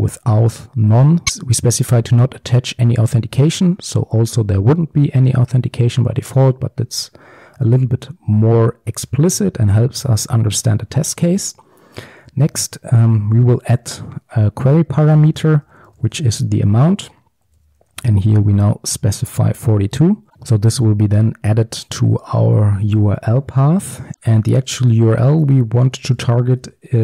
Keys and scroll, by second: 7.5 Tab, 13.0 Return, 24.1 ctrl+z, 26.2 Return.